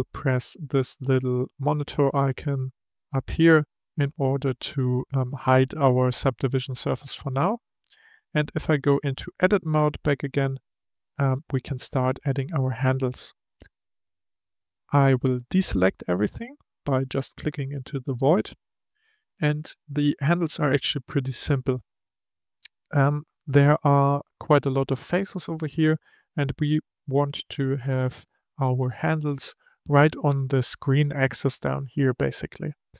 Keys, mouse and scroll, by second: 1.7 click, 7.2 click, 7.7 click, 9.2 Tab, 9.8-12.8 middle drag, 14.0 click, 15.2-19.9 middle drag, 19.9-21.5 scroll up 1, 21.5-23.0 scroll up 1, 27.1-30.1 middle drag, 32.6-32.9 middle drag.